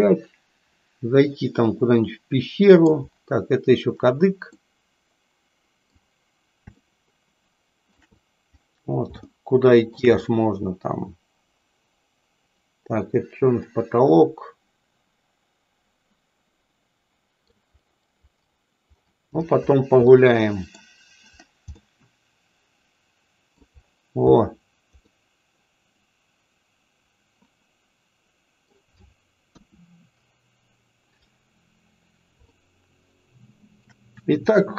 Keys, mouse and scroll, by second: 4.7-6.0 middle drag, 6.9-8.0 shift+middle drag, 9.3 shift+middle click, 10.3-17.4 middle drag, 20.2 middle click, 22.0-23.8 middle drag, 25.2-28.7 middle drag, 32.5 shift+middle click, 33.1 shift+middle click.